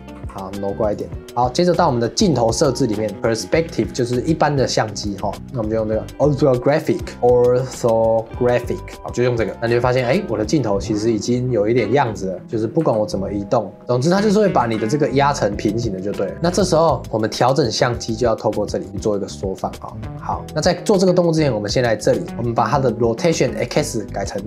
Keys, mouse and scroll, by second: 0.2 g, 2.6 click, 5.0-7.0 drag, 9.6 scroll down 5, 12.0 click, 12.8 g, 13.8 r, 14.1 scroll down 1, 14.6 g, 16.5 scroll down 1, 16.8 scroll up 3, 17.0-17.6 scroll down 2, 17.8 click, 18.9-20.9 drag, 22.0 click, 23.7-24.4 drag.